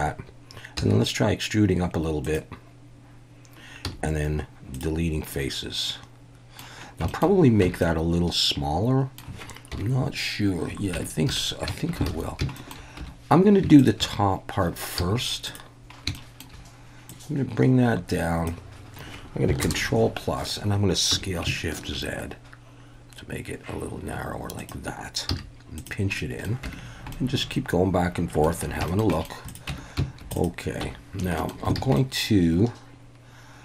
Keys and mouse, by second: 0.8 e, 2.2 click, 3.9 x, 5.3-6.6 middle drag, 7.1 shift+middle click, 7.6 Tab, 7.8-9.2 middle drag, 9.7 KP_1, 10.9 Tab, 11.3 a, 12.1 alt+a, 12.6 shift+middle click, 13.0 2, 15.0 z, 16.1 shift+middle drag, 17.2-18.5 drag, 19.6 ctrl+KP_Add, 21.1 s, 21.8 shift+z, 24.6 click, 25.3 z, 26.2 middle drag, 26.6 Tab, 27.1-28.4 middle drag, 28.9 shift+middle click, 29.1 middle click, 30.4 click, 30.8 Tab, 31.4 shift+middle click, 31.8 alt+a, 32.0-33.6 middle drag.